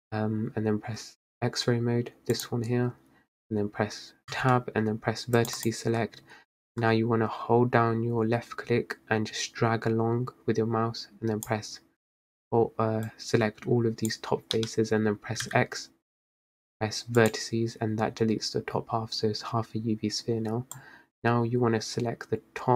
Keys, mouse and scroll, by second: 2.5-4.4 drag, 4.4 Tab, 5.5-6.3 drag, 6.3-6.9 scroll up 2, 6.9 click, 13.2 click, 15.6 x, 20.9 click.